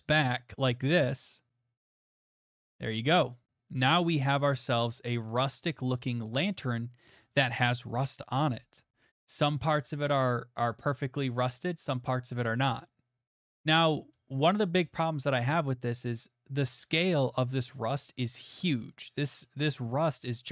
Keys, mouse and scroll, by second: 1.9 click, 2.0 scroll, 5.9 middle click, 6.0 middle click, 6.0 middle click, 6.7 middle click, 9.1 middle click, 9.4 middle click, 9.4 middle click, 10.1 shift+middle click, 10.6 shift+middle click, 10.8 middle click, 11.8 middle click, 14.0 middle click, 14.2 middle click, 14.9 middle click, 14.9 shift+middle click, 15.7 middle click, 15.8 middle click, 17.0 shift+click, 17.4 click, 17.4 click, 17.7 click, 17.8 click, 17.8 shift+click, 18.3 click, 18.8 click, 18.9 click, 19.0 click, 20.3 click.